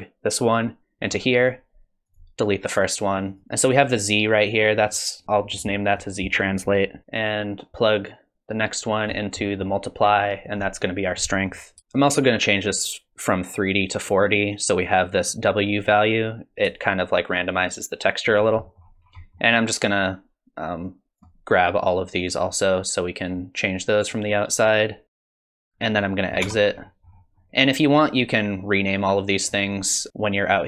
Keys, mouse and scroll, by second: 2.1 click, 3.3 click, 3.4-4.6 scroll up 3, 4.8 click, 6.0 click, 7.0 middle click, 7.0 click, 7.0-7.9 scroll down 5, 9.4 middle click, 10.5 click, 10.9 click, 11.8 middle click, 11.8 scroll down 4, 12.8 click, 16.8 shift+click, 18.7 middle click, 18.9-19.9 scroll down 4, 19.2 middle click, 20.1 click, 22.3 click, 24.1 click, 25.2 click, 25.4 click, 25.6 scroll up 2, 25.7-26.4 scroll down 5, 26.4 Tab, 26.8-27.9 scroll up 8, 29.4 click.